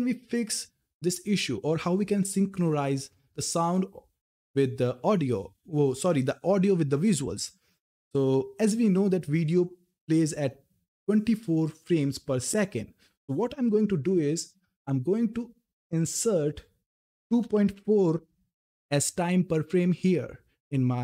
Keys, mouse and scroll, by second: 15.7 click.